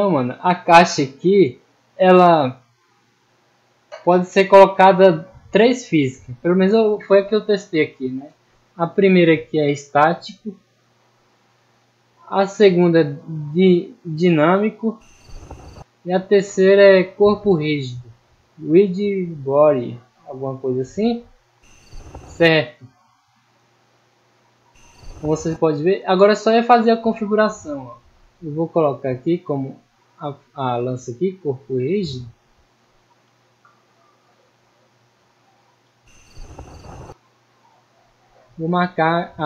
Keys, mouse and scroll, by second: 0.0-0.3 middle drag, 0.6 middle drag, 1.0-1.4 middle drag, 3.5-4.0 middle drag, 4.9-5.5 middle drag, 10.3 click, 12.8 click, 13.9-14.4 middle drag, 16.8 click, 17.9 click, 20.3-20.7 middle drag, 21.0 middle click, 22.5-22.9 middle drag, 23.5-23.9 scroll down 2, 23.9-24.3 middle drag, 25.6 middle drag, 26.1 scroll up 1, 26.6-26.9 middle drag, 27.8 right click, 28.8-29.3 drag, 30.1 click, 31.3 click, 32.0 middle click, 35.3 click, 37.8 right click, 38.6 middle click.